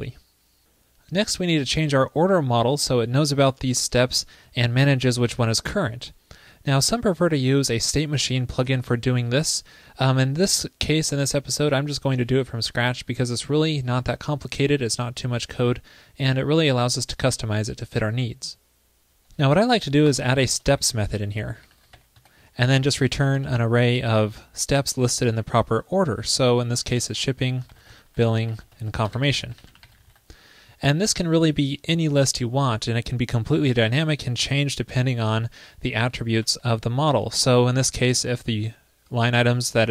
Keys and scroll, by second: 20.2 super+Return, 36.4 alt+Left, 36.6 alt+Left, 36.7 alt+Left, 37.4 alt+shift+Right.